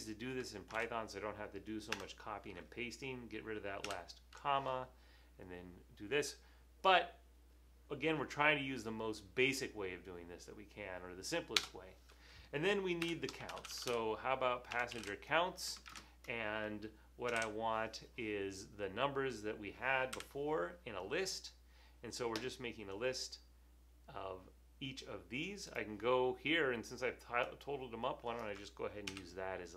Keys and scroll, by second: 0.2 super+v, 3.3 BackSpace, 4.0 ], 11.7 Return, 12.8-15.9 typing, 17.1-17.8 typing, 20.4 Left, 29.2 super+c.